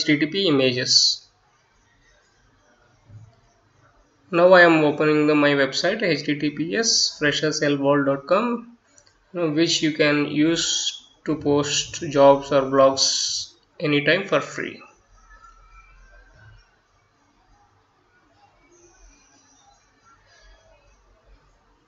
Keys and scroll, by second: 6.5-9.2 typing, 11.1-15.4 typing, 19.5 Delete, 20.1 Return.